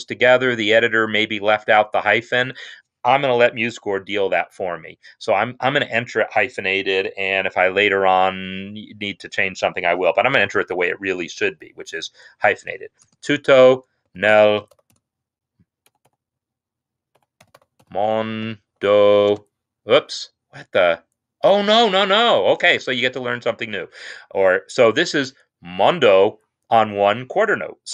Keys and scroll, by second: 13.0-16.0 typing, 17.0-20.8 typing, 22.7 shift+space.